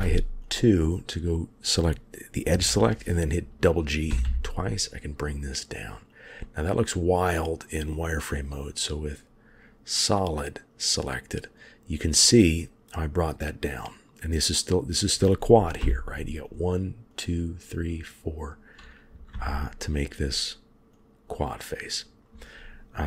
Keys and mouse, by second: 0.3 click, 4.0 g, 8.2 click, 9.8-11.4 middle drag, 15.7 1, 19.2 3, 19.8 click.